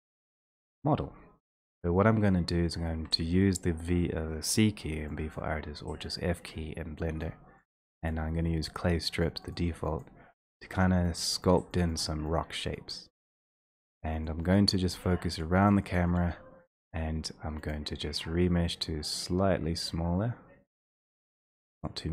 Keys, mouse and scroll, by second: 1.0-1.8 v, 1.9-3.1 x, 5.6 click, 5.9 x, 6.4 x, 6.5 x, 7.2 click, 7.7 click, 8.3 click, 9.2 click, 9.5 click, 10.0 click, 10.7 click, 11.2 click, 11.6 click, 11.9 click, 12.1 click, 12.4 click, 12.7 click, 13.0 click, 13.5 click, 13.6 click, 14.0 click, 14.3 click, 14.5 click, 14.8 click, 15.2 click, 15.4 click, 15.7 click, 16.0 click, 16.2 click, 17.7 click.